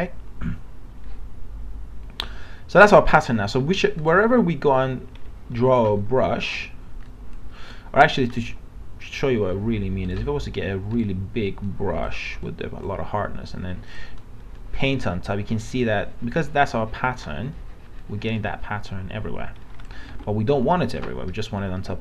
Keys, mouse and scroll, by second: 6.0 ctrl+z, 6.3 right click, 7.1 click, 10.1 right click, 11.6-19.9 drag, 20.1 ctrl+z, 21.6 alt+scroll up 1.